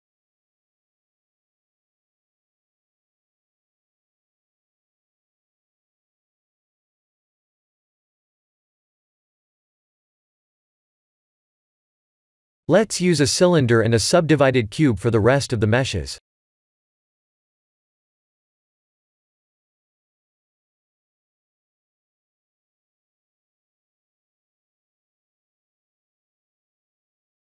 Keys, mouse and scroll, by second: 0.3 KP_1, 1.4 middle click, 4.6 KP_1, 5.0 shift+z, 11.0 click, 11.4 shift+a, 12.4 Tab, 12.7 shift+a, 17.2 r, 19.4 s, 20.8 g, 24.9 s, 26.0 g.